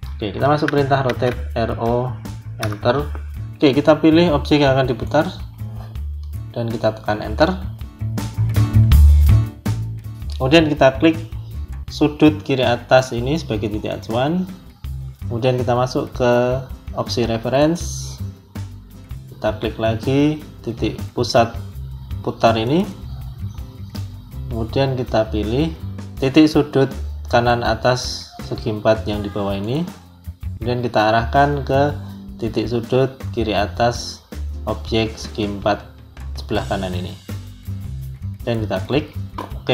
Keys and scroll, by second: 0.9 r, 1.6 o, 2.5 Return, 7.1 Return.